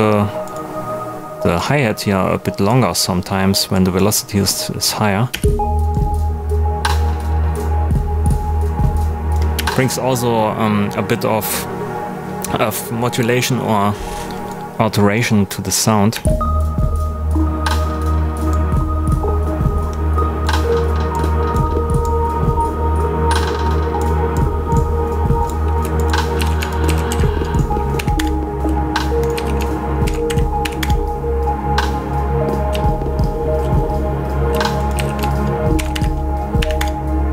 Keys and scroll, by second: 5.3 space, 9.5 space, 16.1 space, 26.3 super+a, 26.8 shift+super+d, 27.1 shift+#, 27.9 5, 28.1 Return, 28.6 super+Return, 29.3 super+a, 30.0 shift+super+d, 30.2 shift+#, 30.6 7, 30.8 Return, 34.9 super+a, 35.7 shift+super+d, 35.9 shift+#, 36.5 8, 36.7 Return.